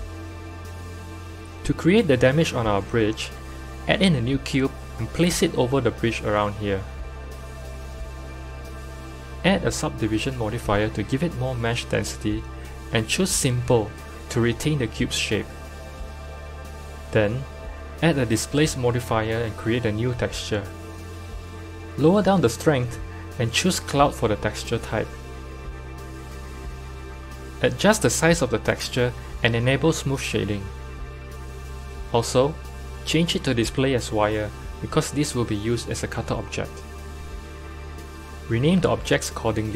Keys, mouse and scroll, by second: 0.8 n, 1.2 click, 1.5 shift+a, 3.2 shift+a, 3.8 g, 5.3 KP_7, 5.7 g, 9.6 drag, 10.2-14.3 drag, 14.9-21.1 drag, 22.0-25.1 drag, 26.4-30.8 drag, 30.8-34.5 right drag, 34.5 click, 35.3-37.9 drag, 37.9 F2, 39.4 t.